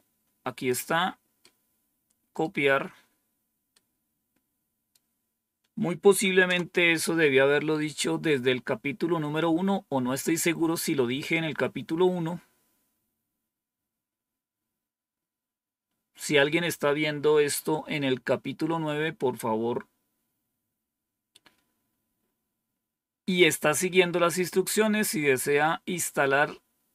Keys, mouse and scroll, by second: 1.3-2.3 right drag, 3.6-4.8 right drag, 6.3 Return.